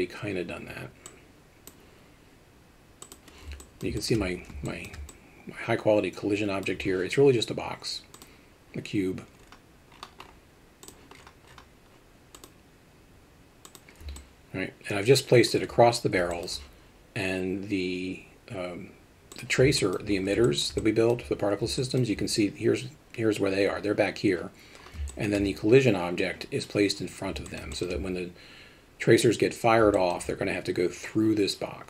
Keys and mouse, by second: 3.0 click, 3.6 alt+middle drag, 4.0 alt+shift+middle drag, 4.6 alt+shift+middle drag, 5.1-6.6 alt+middle drag, 8.2 drag, 10.8 click, 12.4-13.7 drag, 14.2-15.5 alt+middle drag, 16.3 alt+shift+middle drag, 19.4 click, 19.8 alt+middle drag, 20.4 alt+shift+middle drag, 20.8-21.1 alt+middle drag, 21.8 alt+middle click, 25.1 alt+shift+middle drag, 27.5 alt+middle click, 27.7 shift+middle drag, 29.9 middle click.